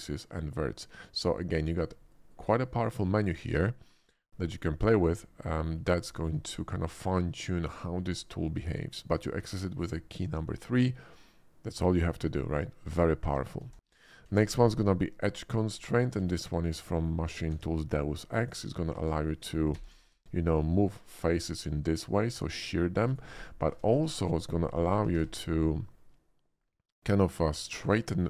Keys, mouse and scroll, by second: 4.5 shift+middle click, 5.2 shift+middle click, 6.1 shift+middle click, 6.5 shift+middle click, 8.9 shift+middle click, 9.3 shift+middle click, 13.2 Tab, 13.6 x, 13.6 Tab, 13.8 click, 14.2 shift+a, 15.6 click, 16.1 alt+middle drag, 16.5 alt+middle drag, 16.9 alt+middle click, 17.4 Tab, 17.8 middle click, 18.4 click, 19.7 alt+r, 20.1 x, 23.1 right click, 23.8 Tab, 23.9 x, 24.1 click, 24.8 click, 25.1 shift+a, 27.6 click, 28.1 click.